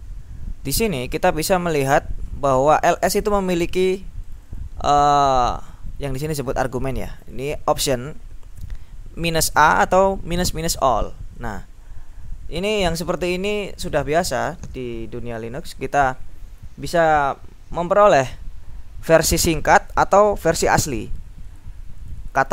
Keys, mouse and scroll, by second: 0.1-0.6 scroll down 2, 3.1 click, 4.4 click, 6.3 click, 7.3 click, 10.7 click, 19.7-20.4 scroll up 1, 20.6-21.2 scroll up 1, 21.2-22.2 scroll up 1, 22.3-22.5 scroll up 1.